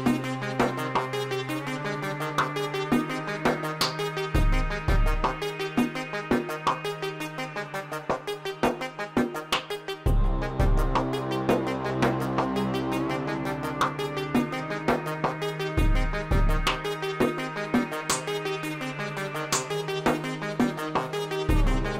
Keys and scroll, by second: 5.2 shift+d, 7.2 x, 8.5 y, 12.1 l, 14.8 shift+d, 15.0 x, 20.8 s.